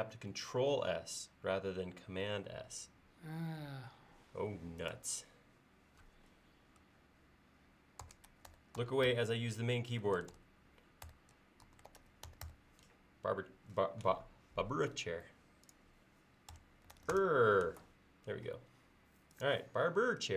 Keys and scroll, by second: 7.8-9.6 typing, 16.6-17.5 typing.